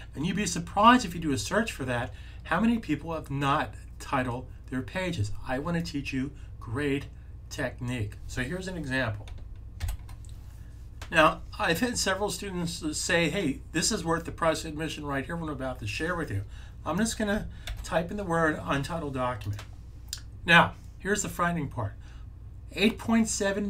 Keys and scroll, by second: 9.7 x, 17.5 super+v.